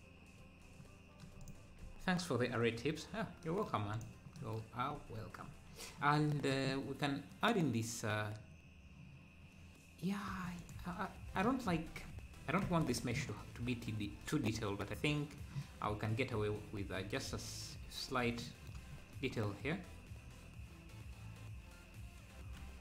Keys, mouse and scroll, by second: 0.0-0.4 scroll down 1, 1.4 click, 1.9 ctrl+s, 3.9 click, 5.5 scroll down 1, 6.9-7.5 scroll down 2, 10.6 click, 11.7 Tab, 12.6 Tab, 13.4-14.0 scroll down 1, 14.0 scroll down 1, 14.0-14.6 scroll up 1, 16.4 Tab, 16.4 scroll up 3, 16.9 Tab.